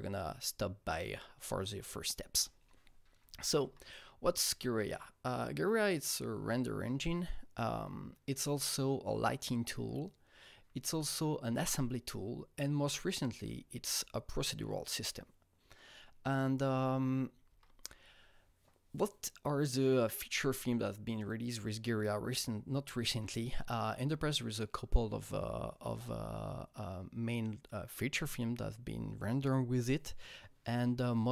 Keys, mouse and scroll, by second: 3.6 Right, 8.3 Right, 11.0 Right, 12.9 Right, 17.4 Right, 23.1 Right, 23.1-25.2 Right.